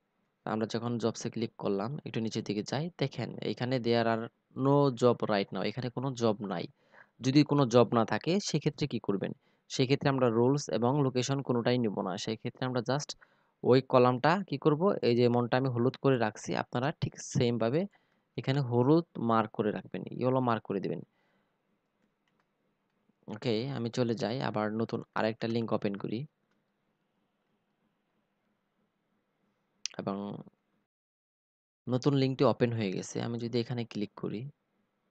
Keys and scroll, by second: 15.1 ctrl+c, 17.0 ctrl+v, 20.9 ctrl+c, 24.2 ctrl+v.